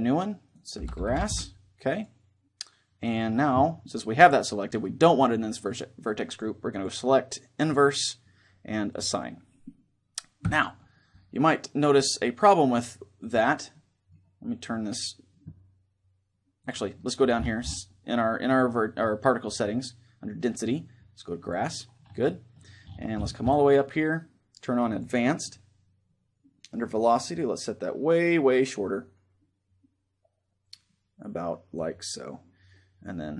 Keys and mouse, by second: 7.4-10.6 drag, 10.2 Tab, 13.4-15.9 middle drag, 16.3-21.9 drag, 21.9-24.7 middle drag, 24.7-26.4 drag, 27.0-28.7 drag, 33.2-33.3 drag.